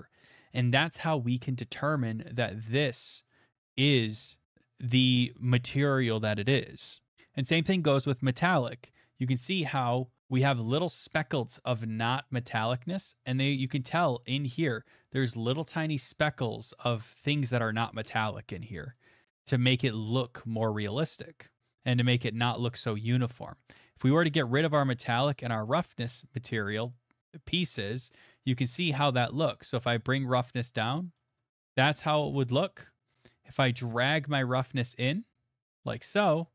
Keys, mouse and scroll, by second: 1.0-4.9 middle drag, 1.0 scroll, 8.5 click, 9.2 middle click, 9.2-13.0 scroll, 13.3 scroll, 14.2 middle click, 14.7 middle click, 19.5 scroll, 22.1-24.4 scroll, 24.4 click, 25.4 click, 26.6 scroll, 27.3-28.3 scroll, 31.1 click.